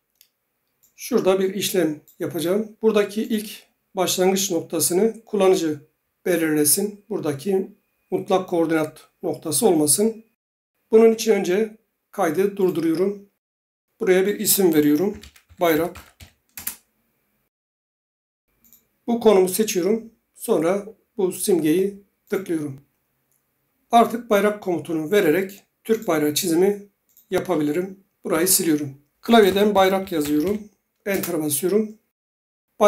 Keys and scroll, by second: 14.8-16.7 typing, 28.3 Delete, 29.1-30.9 typing, 31.1 Return.